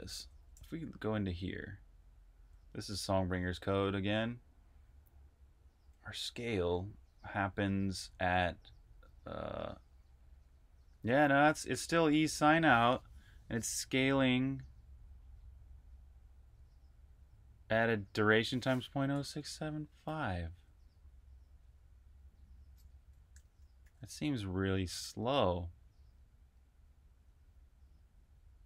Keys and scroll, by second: 0.0-3.3 typing, 5.9-7.3 typing, 8.6-9.4 typing, 10.7-11.8 typing, 19.5-21.0 typing, 23.0 typing, 23.7 super+`.